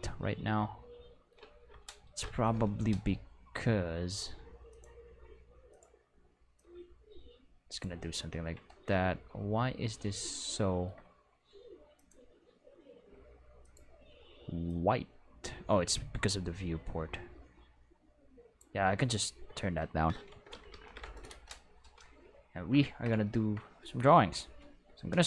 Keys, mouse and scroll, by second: 0.3 middle click, 0.5 middle click, 2.0 Home, 4.6 click, 5.6 click, 6.5-7.7 drag, 11.9 click, 13.6 click, 14.6-18.5 drag, 20.5 ctrl+s, 20.6 ctrl+s, 20.8 ctrl+s, 24.5 click.